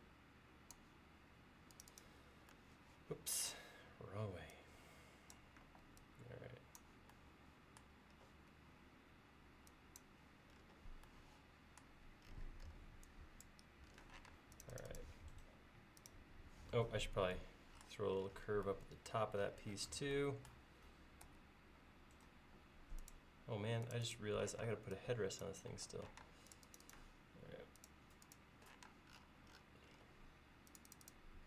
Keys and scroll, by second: 5.7 e, 14.3 space, 21.3 a, 24.5 p, 25.8 e, 26.3 space, 28.9 space.